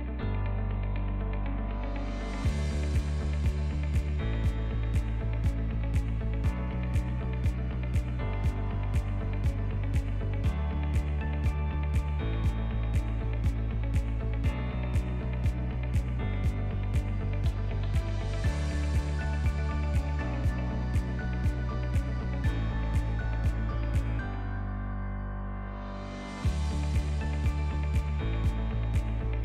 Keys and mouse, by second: 0.2-0.6 shift+middle drag, 1.4 ctrl+2, 2.0 shift+middle click, 2.6 Tab, 2.7 right click, 3.5 middle click, 5.1 right click, 5.9 ctrl+z, 6.5 3, 6.9 click, 7.3 x, 8.8 ctrl+middle click, 9.3 middle click, 10.1 ctrl+middle click, 10.4 shift+middle click, 10.9 2, 11.4 alt+click, 12.0 alt+z, 12.4 alt+shift+click, 13.1 alt+z, 13.7 alt+shift+click, 16.1 click, 16.5-17.6 middle drag, 18.6 alt+shift+click, 19.1 alt+shift+click, 19.5 middle click, 20.8 alt+shift+click, 21.2 middle click, 22.0 alt+shift+click, 22.6 middle click, 23.0 right click, 24.1 middle click, 25.8 ctrl+b.